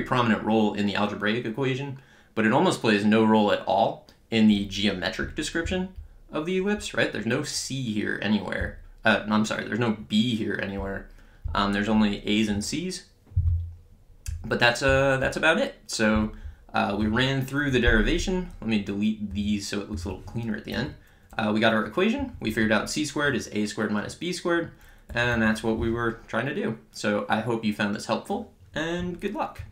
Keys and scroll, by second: 19.3 BackSpace, 20.7 Down.